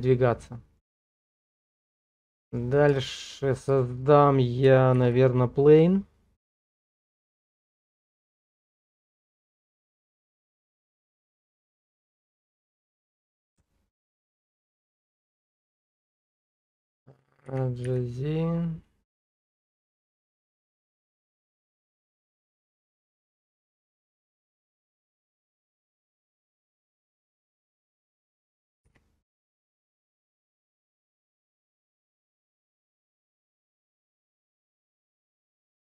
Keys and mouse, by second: 1.2 shift+middle click, 1.5-2.6 middle drag, 3.0 shift+middle click, 3.4 middle click, 3.8 shift+middle click, 4.1 click, 5.0 shift+a, 9.7 s, 11.9 click, 13.4-14.4 alt+middle drag, 15.2 shift+middle click, 17.5 g, 17.9 z, 21.5 click, 22.2 middle click, 22.8-24.6 middle drag, 25.3 middle click, 26.1 shift+click, 26.8 click, 28.9 g, 29.9 middle click, 30.4 middle click, 31.6 g, 34.6 click, 35.0 middle click.